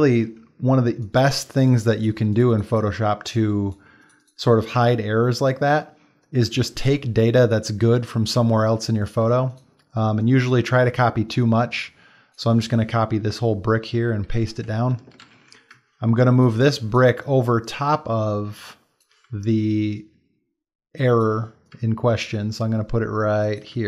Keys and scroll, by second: 1.3 space, 14.0 ctrl+c, 14.3 ctrl+v, 15.3 ctrl+t, 16.5 shift+space.